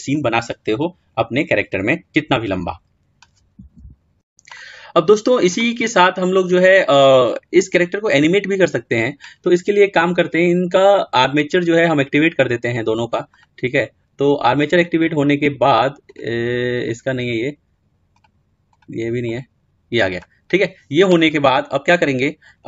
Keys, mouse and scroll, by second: 12.1-14.4 scroll down 2, 14.4-22.1 scroll down 3.